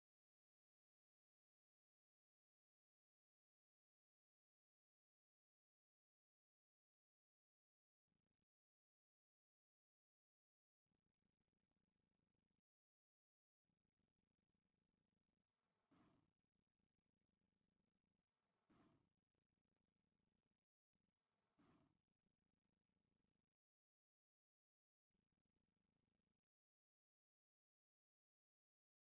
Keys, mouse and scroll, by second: 5.9-7.1 middle drag, 7.1-8.4 drag, 9.2 middle click, 10.1-22.3 drag, 22.8-29.0 drag.